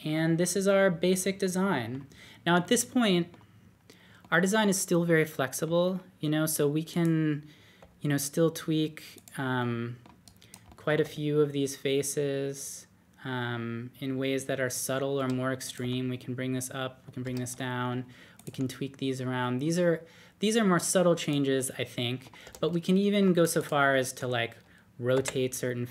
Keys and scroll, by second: 3.7 typing, 7.7 d, 11.0 d, 15.2 Escape, 15.8 typing, 17.2 typing, 18.5 typing, 22.4 typing, 25.1 r.